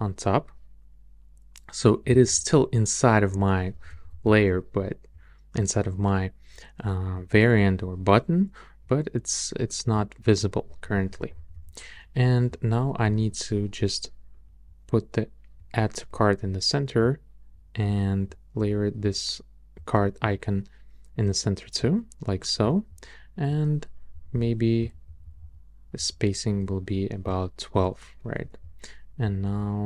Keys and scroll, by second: 0.3 Up, 1.1 Up, 1.9 Up, 3.7 Up, 10.7 Down, 11.3 Down, 24.1 alt+Right, 24.8 alt+Left, 25.1 alt+Right, 26.2 alt+Right.